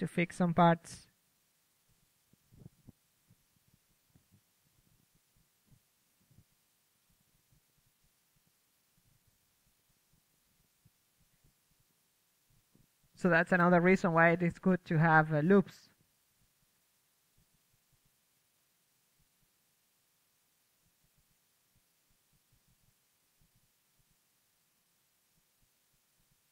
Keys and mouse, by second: 2.3-3.7 drag, 4.4-5.5 drag, 8.4 shift+space, 8.6 KP_3, 10.2 Tab, 11.0 a, 11.5-12.9 drag, 14.0 click, 14.3-15.7 drag, 14.3 right click, 15.7 z, 16.2 KP_3, 18.0 z, 18.6 ctrl+KP_Add, 21.6-24.4 right drag, 24.2 KP_1, 25.5-26.5 typing.